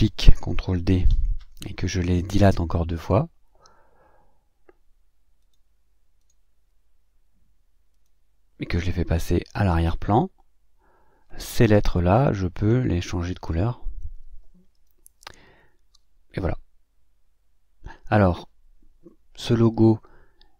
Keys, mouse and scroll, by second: 1.1 ctrl+d, 7.9 click, 9.5 click, 13.3 click, 14.7 click.